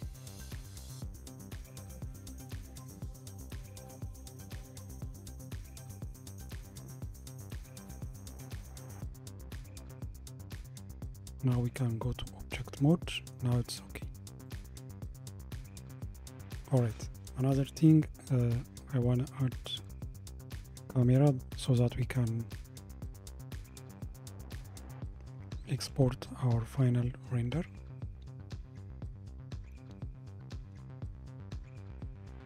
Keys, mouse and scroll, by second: 0.5 click, 2.5 g, 9.0-10.8 scroll down 4, 11.5 Tab, 12.3-14.5 middle drag, 14.5 click, 15.2-17.0 middle drag, 17.0 scroll up 2, 18.2 scroll up 2, 26.7-29.7 shift+middle drag, 30.8 shift+a.